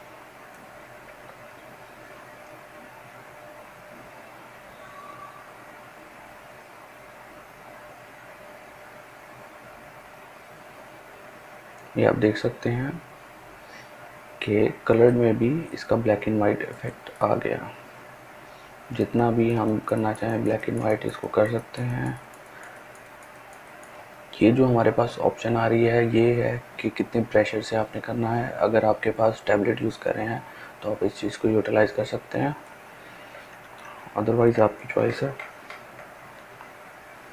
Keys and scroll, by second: 35.0 ], 35.3 ], 35.4 ].